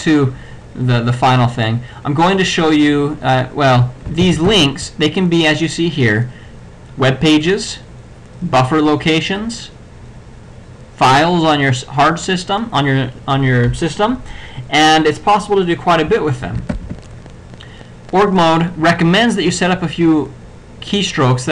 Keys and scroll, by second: 4.3 ctrl+alt+b, 16.8 ctrl+e.